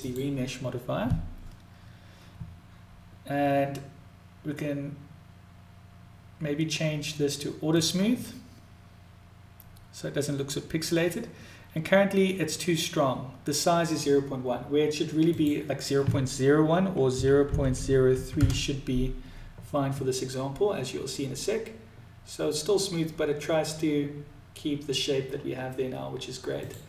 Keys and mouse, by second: 9.7 click, 14.9-20.5 drag, 26.2-26.8 drag.